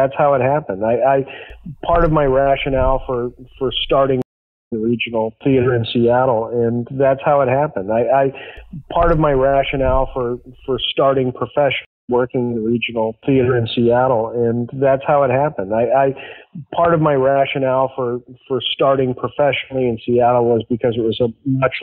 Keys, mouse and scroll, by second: 1.7 s, 2.1-4.1 drag, 4.1 space, 4.5 click, 4.6 space, 7.7 ctrl+s, 9.1 click, 9.8 click, 11.1 click, 11.7 space, 11.9 click, 12.0 space, 15.9 ctrl+s.